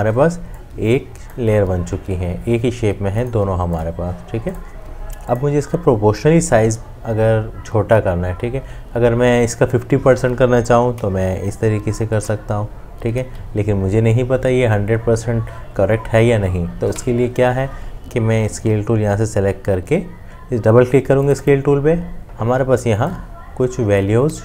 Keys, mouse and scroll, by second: 10.9 alt+click, 16.9 ctrl+z.